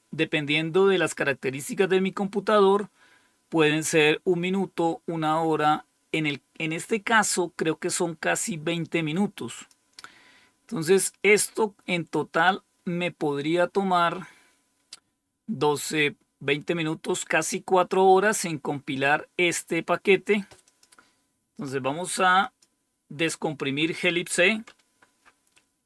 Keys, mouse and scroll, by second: 9.4 click, 11.3-12.4 drag, 20.5 click, 22.3 click.